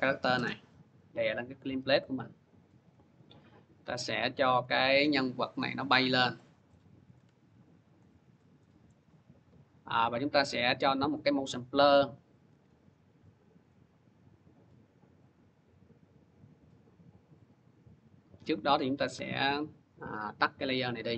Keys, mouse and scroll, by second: 0.2 u, 1.2 click, 1.5 u, 3.2 click, 4.4 v, 5.4 click, 6.6 middle click, 8.1 shift+click, 8.7 middle click, 10.9 click, 10.9 scroll, 11.9 click, 12.3 shift+click, 12.3 scroll, 12.3 F4, 13.5 scroll, 17.9 click, 18.1 click, 18.9 alt+[, 20.2 click, 21.1 click.